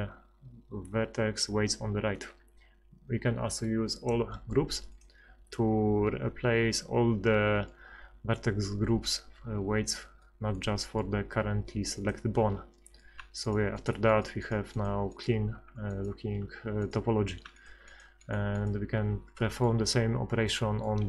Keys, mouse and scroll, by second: 2.3 F6, 10.3 middle click, 12.0-13.4 middle drag, 13.4-15.8 right drag, 20.7 middle click, 20.7 click.